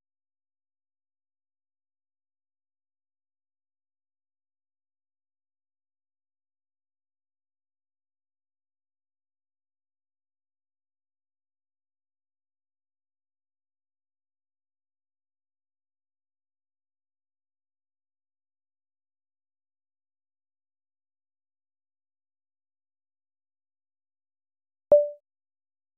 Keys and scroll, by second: 1.9-3.3 typing, 5.2 ctrl+l, 9.2-15.2 typing, 15.8 Escape, 16.4 k, 18.6 ctrl+x, 20.1 Escape, 21.1 ctrl+x, 24.4 Escape, 24.5 Escape, 24.9 k.